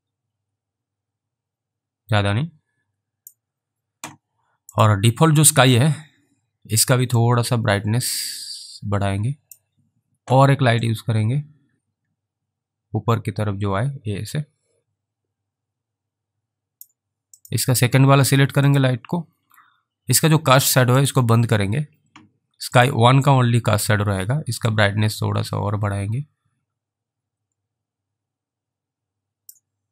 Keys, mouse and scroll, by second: 4.8 click, 7.6 click, 11.1 click, 16.8 click, 17.5 click, 25.1 click.